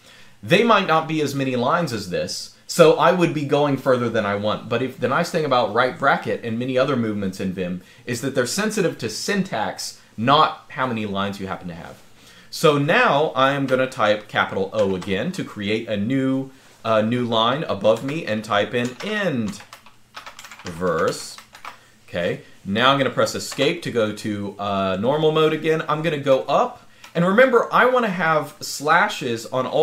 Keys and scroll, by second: 14.5 typing, 17.7-21.8 typing, 23.4 Escape, 26.1 k, 26.8 k.